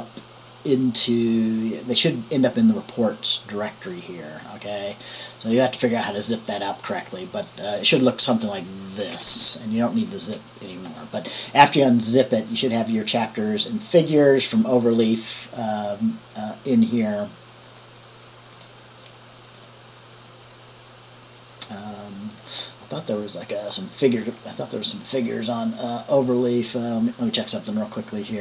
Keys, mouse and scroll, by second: 0.0-3.4 drag, 9.3 Delete, 10.5 Delete, 12.7 drag, 14.0 click, 15.9-17.1 drag, 17.2 click, 18.8 click, 19.8 click, 22.5 click, 23.3 click, 26.4 click.